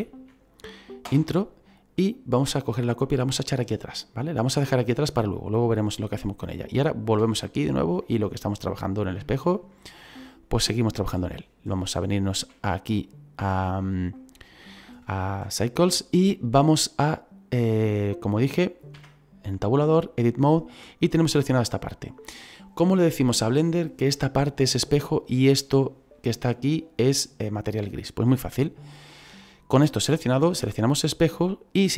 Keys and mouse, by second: 1.9 click, 3.6 middle click, 4.6 middle click, 6.6 right click, 7.2 shift+middle click, 9.7 middle click, 10.8 shift+middle click, 14.0 click, 18.9 Tab, 19.9 click, 30.9 click.